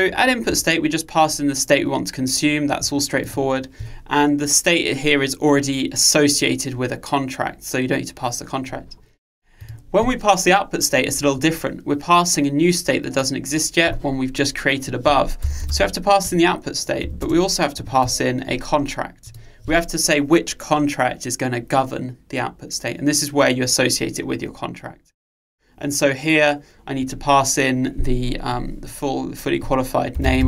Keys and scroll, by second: 16.3 Return.